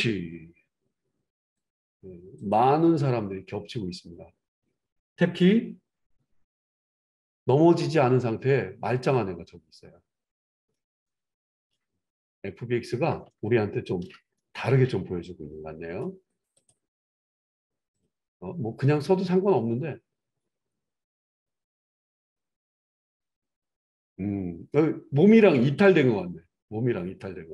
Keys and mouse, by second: 0.5-2.4 middle drag, 0.5 /, 2.4 click, 2.5-27.5 middle drag, 6.6 Tab, 17.9 click.